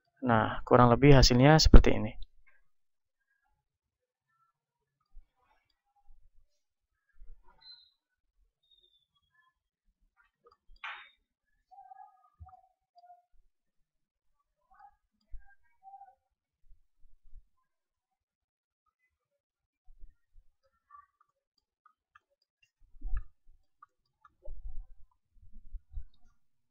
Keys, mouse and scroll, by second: 1.0 middle click, 1.6 click, 1.6-4.3 right drag, 5.1-6.1 drag, 5.1 right click, 6.1-7.1 right drag, 7.6 right click, 8.0 click, 10.4-12.2 drag, 10.4-12.2 right drag, 12.6-14.2 drag, 13.4 right click, 14.9-16.4 drag, 14.9-16.4 right drag, 17.5-19.4 drag, 19.4-26.7 middle drag, 19.4 z, 20.1 z, 20.5 Tab, 21.8 z, 22.4 Tab, 25.1 KP_1.